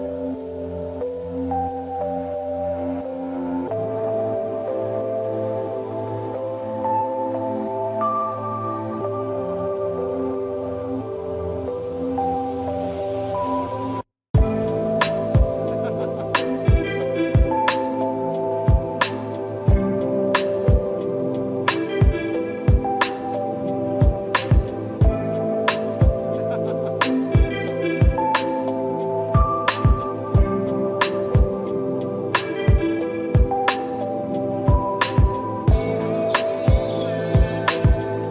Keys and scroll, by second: 20.8 ctrl+=, 21.3 ctrl+-, 21.9 ctrl+=.